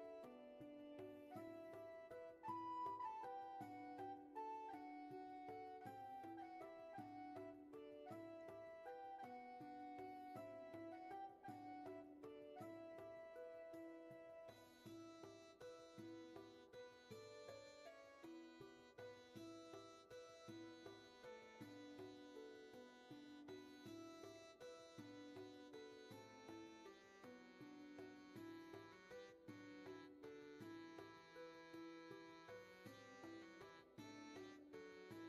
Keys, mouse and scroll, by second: 6.6 scroll down 1, 7.2-8.1 scroll up 1, 12.6 scroll down 1, 13.1 space, 13.8 scroll down 1, 14.4 space, 14.9 scroll down 1, 15.8 space, 21.4 scroll up 1, 25.4 ctrl+z, 31.9 scroll down 1.